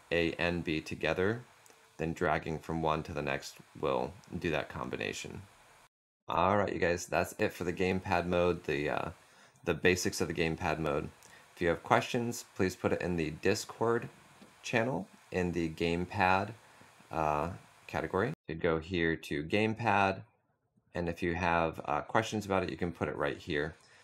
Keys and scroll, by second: 18.2 typing.